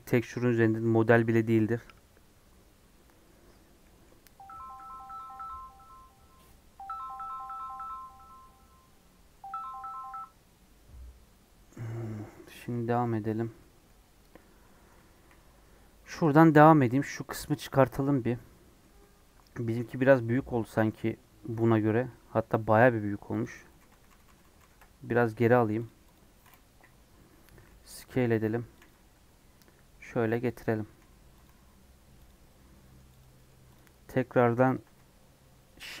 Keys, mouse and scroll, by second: 14.1 scroll down 1, 14.3 middle click, 15.1 KP_1, 15.5 KP_3, 15.8-16.2 scroll up 5, 19.5-20.1 scroll down 2, 20.2-23.4 middle drag, 23.4 click, 23.7 ctrl+z, 23.8 ctrl+z, 24.0 ctrl+z, 24.2 ctrl+z, 24.4 ctrl+z, 24.5 ctrl+z, 25.1 Tab, 25.5 Tab, 25.8 click, 26.1 click, 26.6 KP_1, 27.3 scroll up 1, 27.6 s, 28.9 g, 30.8 s, 31.4 g, 32.6 scroll up 1, 32.7 middle click, 33.2 click, 33.3 middle click, 33.7 click, 33.9-36.0 middle drag.